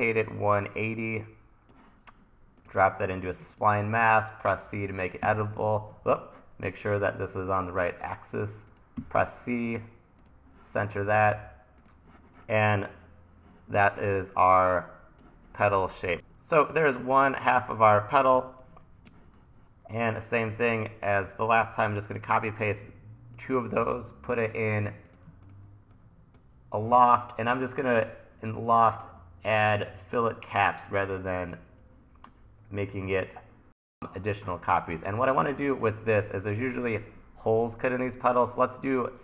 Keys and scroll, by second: 5.2 c, 5.9 super+z, 9.1 c, 13.8 t, 17.0 1, 17.8 t, 20.6 e, 21.3 super+c, 21.6 super+v, 21.9 e.